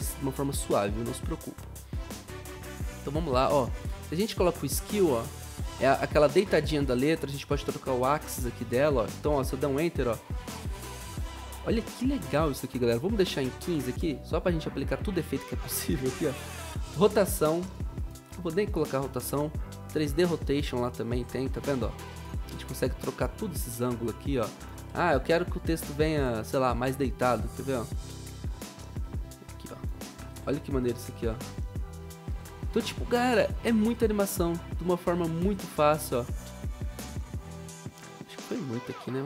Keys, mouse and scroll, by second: 9.4 Up, 11.6 0, 12.9-14.0 typing, 24.8 ctrl+z, 30.2 0, 32.2 0, 37.2 Return.